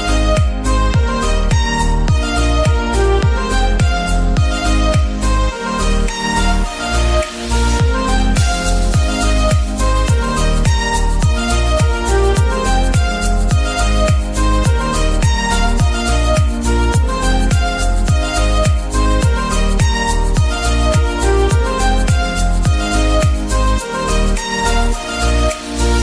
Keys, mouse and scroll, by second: 0.0 click, 0.4-0.7 scroll down 1, 1.3 click, 1.7 scroll down 1, 2.9 click, 4.0-8.5 drag, 8.8 middle click, 9.2 shift+d, 9.6 t, 11.5 y, 12.3 click, 12.6 r, 12.9 x, 14.5 click, 14.7 g, 15.0 z, 15.9 click, 17.9-18.9 middle drag, 18.5 scroll up 1, 21.1-26.0 middle drag, 21.1 scroll down 1.